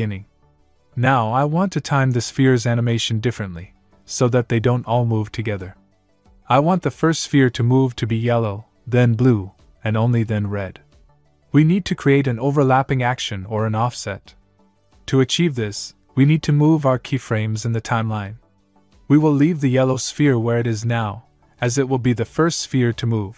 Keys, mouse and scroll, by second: 2.3 click, 12.6 click, 16.5 click, 22.7 click.